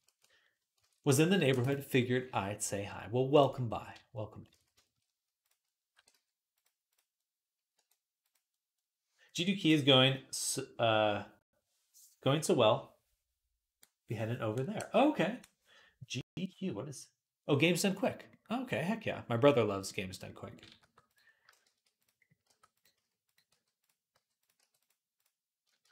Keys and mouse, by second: 0.6 ctrl+Tab, 2.6-5.6 middle drag, 4.4 ctrl+s, 5.6-7.1 drag, 5.7 r, 7.6 r, 8.6-21.1 middle drag, 20.6-24.4 typing, 21.1-25.9 shift+drag, 25.7-25.9 typing.